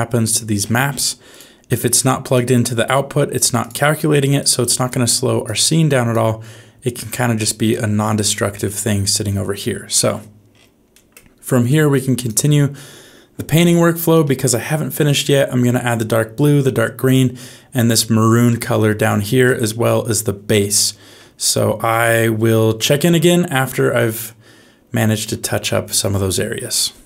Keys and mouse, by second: 1.3 click, 1.9 click, 2.6 g, 4.3 click, 5.4 click, 7.1 click, 8.3 middle click, 9.5 middle click, 10.8 middle click, 11.6 click, 13.6 shift+middle click, 14.2 middle click, 18.4 shift+middle click, 19.4 middle click, 21.4 shift+middle click, 23.0-25.3 middle drag.